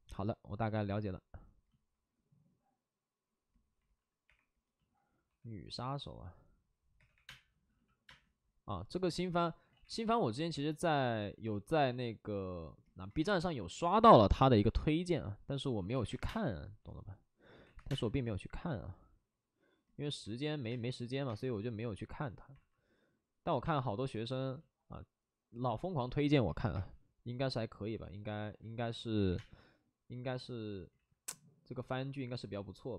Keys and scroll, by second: 5.0-5.7 typing, 6.9-8.0 typing, 9.6 ctrl+z, 9.9 w, 13.2 3, 15.7 ctrl+z, 15.7-16.6 typing, 17.5 ctrl+z, 17.7 3, 17.8 space, 20.2 alt+s, 20.6 space, 22.5 alt+s, 22.5 space, 23.6 space, 26.7 space, 29.2 3, 29.3 space, 30.9 ctrl+z.